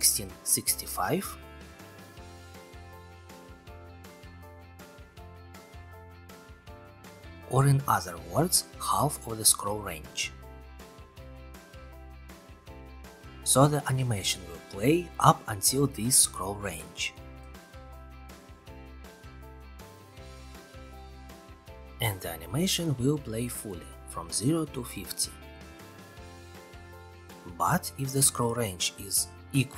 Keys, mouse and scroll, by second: 0.1 click, 1.1 click, 3.6 click, 4.0 click, 5.9-6.8 typing, 8.1 click, 8.2 1, 8.8 click, 9.7 scroll, 17.4 click, 18.1-19.5 typing, 21.2 click, 25.5 click, 26.4 ctrl+c, 26.6 ctrl+v, 28.6 click.